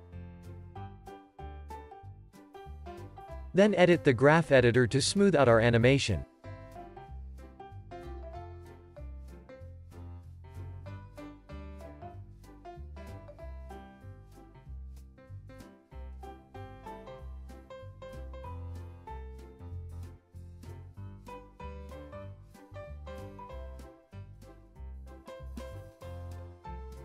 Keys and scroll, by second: 0.0 x, 2.8 super+c, 3.0 super+v, 4.0 super+s, 15.9 super+s.